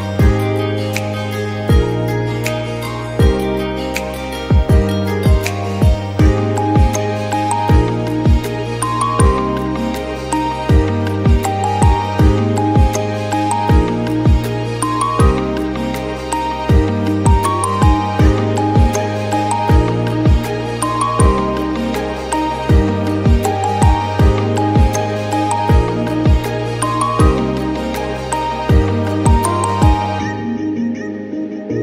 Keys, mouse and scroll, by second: 0.2 3, 0.4 alt+click, 0.8 1, 4.2-4.9 scroll down 2, 4.9 Tab, 5.1 alt+z, 5.2 scroll down 1, 5.6 middle click, 6.3-7.0 scroll down 2, 6.6 ctrl+s, 7.0 shift+middle click, 7.5 middle click, 7.8-8.9 scroll up 4, 8.1 Tab, 8.4 shift+middle click, 8.9 3, 9.2 alt+click, 9.5 middle click, 9.8-10.2 scroll down 4, 10.2 alt+shift+click, 10.5 shift+middle click, 11.1 alt+shift+click, 11.4 shift+middle click, 12.1 alt+shift+click, 12.5 scroll down 2, 12.6 shift+middle click, 12.7-13.3 scroll up 2, 13.4 p, 15.0-19.7 drag, 19.7-21.7 middle drag, 21.7 Tab, 22.1 alt+click, 22.5 p, 23.3-23.9 shift+drag, 23.9 ctrl+j, 24.5 click, 25.3 Tab, 25.9 click, 26.0 scroll up 1, 26.2 shift+middle click, 27.0 alt+click, 27.7 right click, 28.5-28.9 scroll down 3, 28.6 click, 29.4 click, 29.8 Tab, 30.1 click, 30.2 scroll up 1, 30.4 g, 31.4-31.7 scroll down 8, 31.7 click.